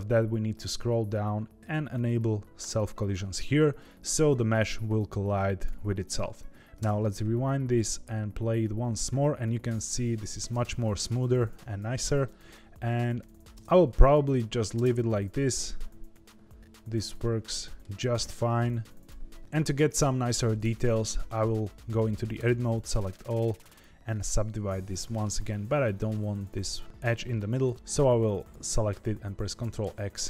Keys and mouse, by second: 2.6 click, 5.0 click, 6.8 space, 10.6 space, 12.2-13.4 middle drag, 13.5 space, 14.8 space, 15.6-17.8 middle drag, 18.7 click, 19.4 Tab, 20.6 Tab, 22.3 a, 23.0 right click, 24.9 middle click, 26.4 2, 27.7 ctrl+z, 28.4 alt+click, 29.7 ctrl+x.